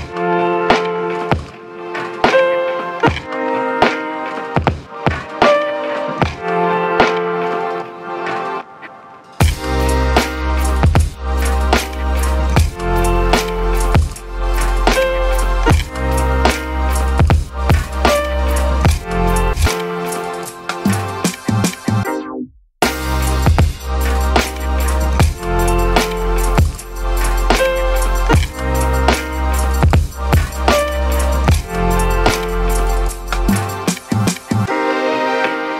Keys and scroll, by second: 2.1 ctrl+d, 3.7 ctrl+Pause, 5.5 ctrl+d, 5.7 ctrl+1, 8.3 ctrl+1, 9.0 ctrl+1, 10.3 ctrl+1, 13.3 ctrl+z, 15.5 ctrl+1, 21.8 ctrl+1, 24.2 ctrl+z, 25.6 0, 25.8 Return, 26.9-27.6 typing, 27.9 ctrl+1, 32.4-33.2 typing.